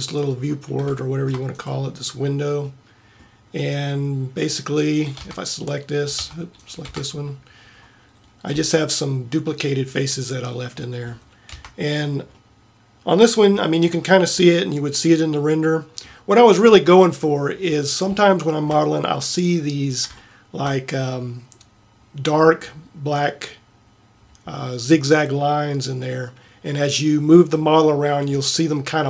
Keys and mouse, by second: 2.0 Tab, 5.4 Tab, 6.4 Tab, 7.0 Tab, 8.6 g, 10.9 middle click, 11.7 Tab, 24.4-26.9 middle drag.